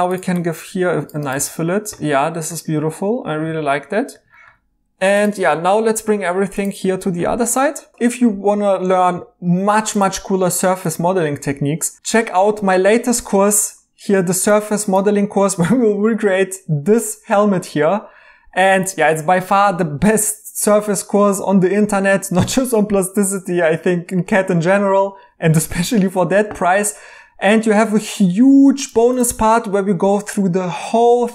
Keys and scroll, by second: 1.3 e, 6.1 Tab.